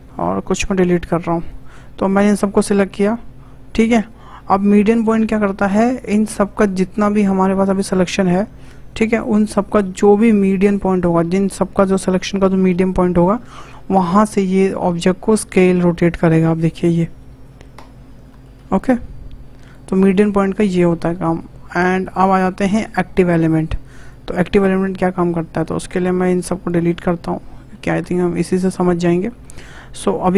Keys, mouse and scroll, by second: 1.0 Delete, 1.5 scroll down 1, 1.7 scroll up 2, 2.2 click, 7.3-7.8 scroll up 4, 7.8 shift+middle click, 8.6 shift+click, 9.3 click, 10.5-10.8 scroll down 4, 10.8-13.2 shift+middle drag, 13.2-14.2 scroll up 2, 14.4 s, 16.9-17.8 scroll up 7, 17.8-18.3 scroll down 5, 18.3-18.6 shift+middle drag, 18.6 shift+s, 20.3-20.9 scroll down 4, 20.9-22.0 shift+middle drag, 22.0-24.1 drag, 24.7-25.1 scroll up 2, 25.1 shift+middle click, 25.6 scroll down 2, 26.2 click, 27.1 Delete, 27.5-27.9 scroll up 6, 27.9 shift+middle click, 28.3 scroll down 3, 28.5 shift+middle click, 28.8-29.2 scroll up 3, 29.2-29.6 shift+middle drag, 29.6-30.3 scroll down 2.